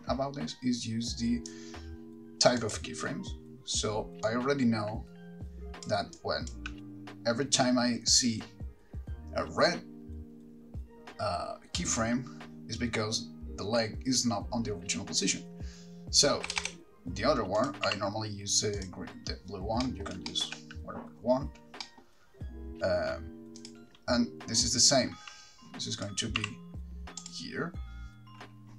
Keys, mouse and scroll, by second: 4.4 click, 6.3 click, 16.7 Right, 16.9 Right, 17.8 click, 19.1 r, 20.0 middle click, 20.5 shift+middle click, 22.0 middle click, 23.9 click, 26.1 click, 27.5 r.